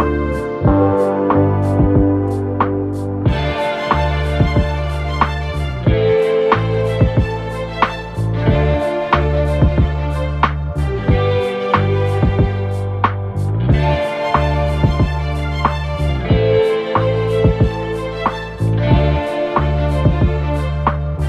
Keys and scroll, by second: 0.0 ctrl+d, 0.1 Escape, 7.7 2, 11.9 4, 14.3 F9.